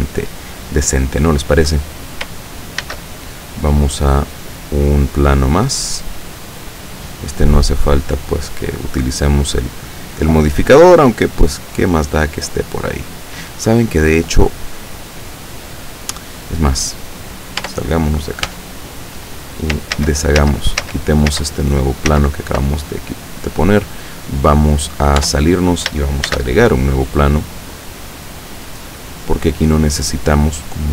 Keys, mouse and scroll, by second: 2.9 shift+a, 4.4 click, 5.7-9.2 drag, 9.8 right click, 10.3-12.3 drag, 17.7 Tab, 18.5 Tab, 20.0 ctrl+z, 22.1 ctrl+z, 25.3 Tab, 26.3 shift+a, 28.7 click, 29.8-30.9 drag.